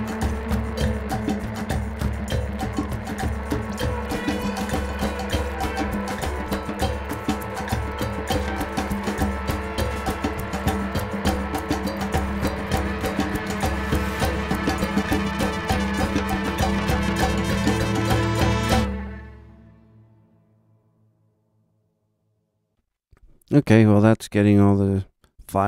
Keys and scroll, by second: 17.7 ctrl+alt+super+Up.